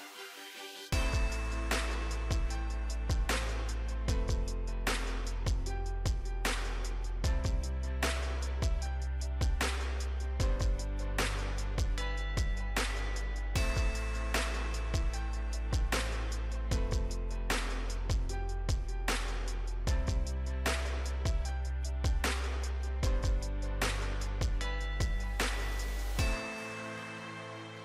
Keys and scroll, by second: 15.2 ctrl+z, 19.6 ctrl+d.